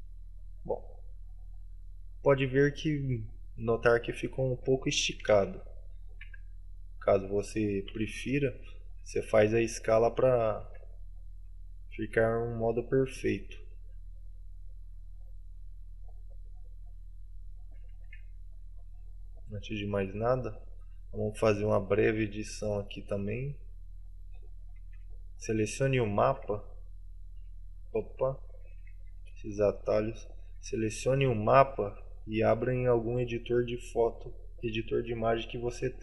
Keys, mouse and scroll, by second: 0.2 middle click, 1.8-4.2 scroll up 11, 4.2-5.5 scroll down 11.